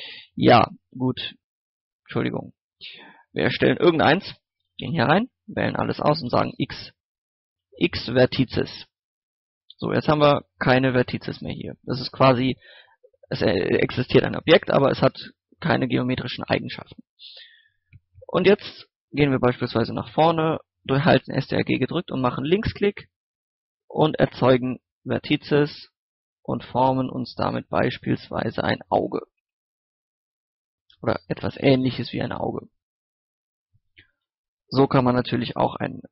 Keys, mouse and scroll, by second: 0.5 ctrl+x, 0.6 click, 1.2 shift+a, 2.3 click, 4.6 Tab, 4.9-6.3 typing, 6.6-7.6 drag, 7.6 typing, 9.2 scroll down 1, 9.5 middle click, 10.1-10.5 scroll up 1, 10.5 middle click, 11.0 scroll up 1, 11.3 middle click, 15.7 scroll up 1, 16.0 middle click, 19.0 KP_1, 23.2 ctrl+click, 23.7 ctrl+click, 24.1 ctrl+click, 25.5 ctrl+click, 27.1 ctrl+click, 29.0-29.8 scroll up 1, 30.5 ctrl+click, 31.8-32.3 scroll down 1, 32.3 scroll up 1, 33.6-34.7 typing, 35.0 click, 35.4 scroll down 1, 35.6 middle click, 35.9 scroll up 1.